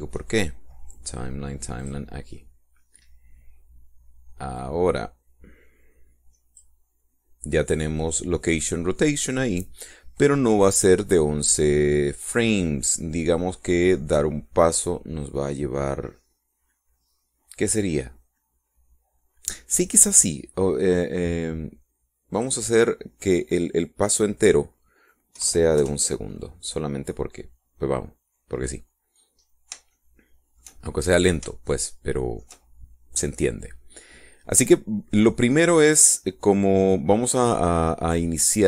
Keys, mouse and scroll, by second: 2.7 click, 5.4-7.7 drag, 23.3 click, 26.3 KP_2, 26.7 KP_Enter, 30.8 shift+middle click, 31.9-32.2 shift+scroll down 3, 32.6 shift+middle click.